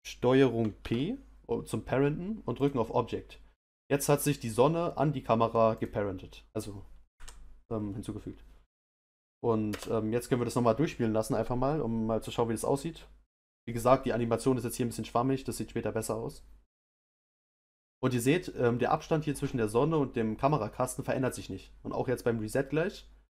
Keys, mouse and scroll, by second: 2.6 ctrl+p, 5.8 click, 7.1 Down, 9.6 space.